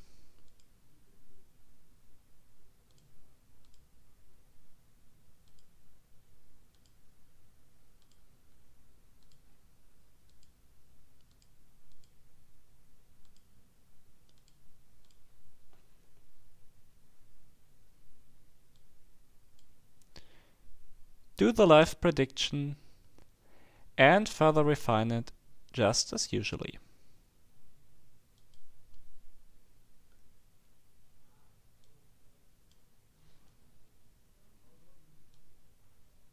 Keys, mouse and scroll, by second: 0.5 click, 2.9 click, 3.7 click, 5.5 click, 6.8 click, 8.0 click, 9.2 click, 10.3 click, 11.3 click, 13.3 click, 14.4 click, 15.1 click, 18.7-20.1 drag, 28.3 click, 31.8-33.2 drag, 35.3-36.3 drag.